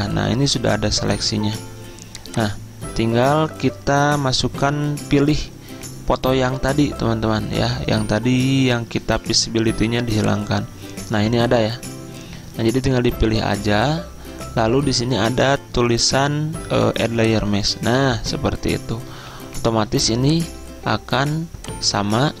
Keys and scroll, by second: 20.0 z.